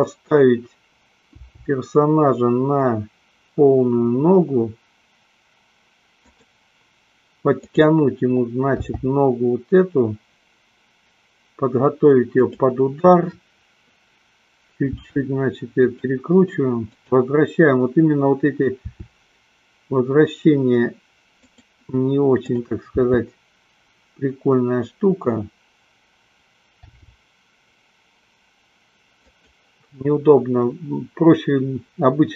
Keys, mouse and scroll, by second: 1.4 g, 6.7 click, 7.7 click, 9.1 g, 15.1 r, 16.1 click, 17.1-18.2 drag, 19.1 r, 21.7 click, 22.6-23.7 drag, 23.9 r, 27.2 g, 29.6 click.